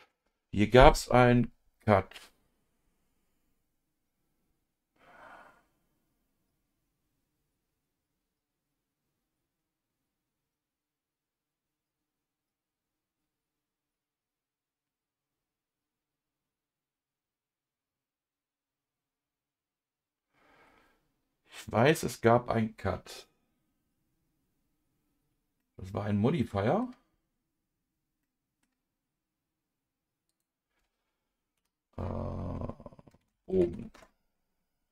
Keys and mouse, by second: 25.6-26.8 middle drag, 28.2 middle click, 31.5 F2.